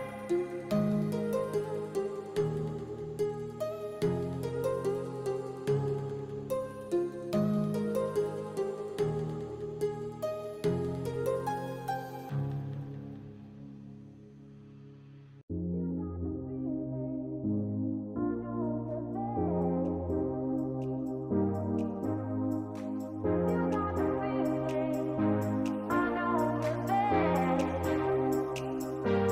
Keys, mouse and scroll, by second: 2.2 s, 6.3 g, 10.7 middle click, 11.4 middle click, 11.8 middle click, 13.0 g, 20.7 shift+middle click, 21.3 shift+middle click, 21.9 shift+middle click, 22.1 click, 22.6 shift+middle click, 24.2 shift+middle click, 24.6 g, 26.6 shift+middle click, 27.4 r.